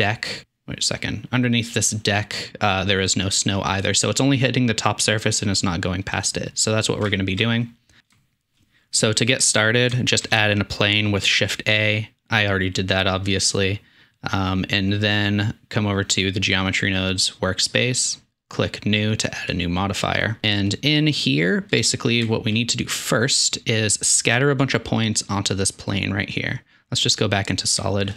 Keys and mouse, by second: 6.0-6.8 middle drag, 7.1-7.4 shift+middle drag, 7.4 click, 8.1-8.6 shift+middle drag, 9.9 shift+middle drag, 15.0-19.3 drag, 22.2 shift+middle drag, 27.3-28.1 middle drag.